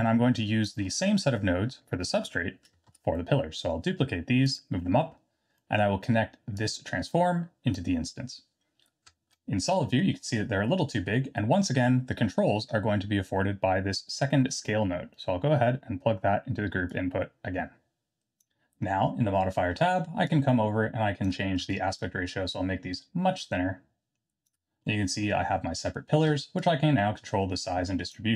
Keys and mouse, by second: 0.8 middle click, 2.9 shift+d, 4.9 middle click, 5.6 middle click, 6.5-7.7 drag, 9.0 z, 9.7 middle drag, 10.7 middle click, 11.5 middle click, 16.9-18.4 drag, 20.2-21.3 shift+drag, 21.7-24.5 shift+drag, 24.8-25.2 middle drag, 26.5-28.1 shift+drag.